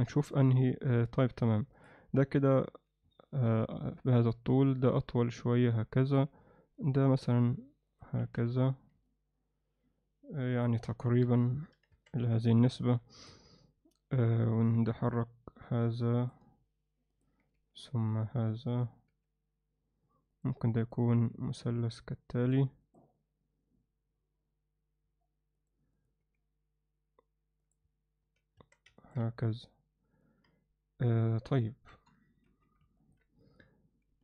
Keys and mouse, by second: 0.0 KP_1, 1.1 KP_7, 1.8 click, 2.7 g, 4.5 click, 4.8 g, 6.8 click, 6.9 g, 8.2 z, 8.5 Tab, 9.0-10.6 alt+middle drag, 11.2 KP_7, 11.9 Tab, 12.2 z, 12.8 ctrl+alt+middle click, 13.2 click, 14.1 g, 17.2 click, 17.4 g, 19.1 g, 21.3 g, 23.1 g, 25.9 click, 28.2 g, 28.2 z, 28.6 Tab, 29.0 ctrl+alt+middle drag, 29.2-30.2 middle drag, 31.9 KP_3, 32.4 z, 33.0 ctrl+alt+middle click.